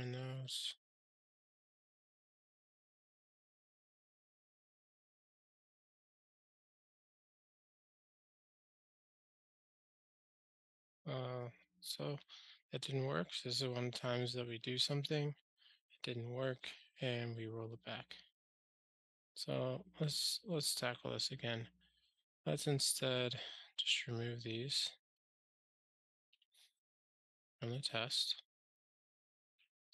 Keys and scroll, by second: 4.0 ctrl+alt+shift+r, 8.6 super+z, 9.6 super+z, 12.0 ctrl+alt+shift+r, 27.4 ctrl+alt+shift+r.